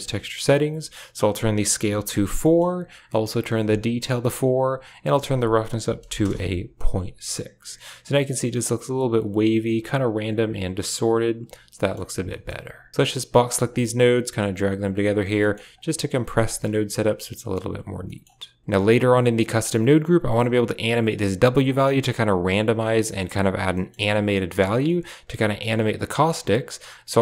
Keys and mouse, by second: 1.2 click, 2.3 middle click, 3.6 click, 4.7-6.1 drag, 11.6 click, 12.0 a, 12.1 click, 12.9 g, 13.4 b, 14.1 g, 15.2 middle click, 15.6-16.0 drag, 16.2 g, 16.5 a, 16.9 click, 17.3 click, 17.8 a, 17.9 middle click, 18.6 click, 19.5-21.5 drag, 23.6 middle click, 26.0 middle click.